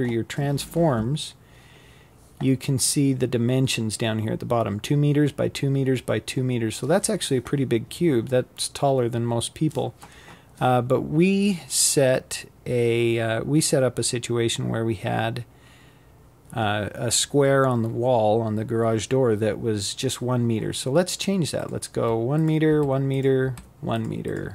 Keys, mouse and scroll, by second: 19.2 click, 20.4 1, 20.8 click, 21.9-22.9 drag.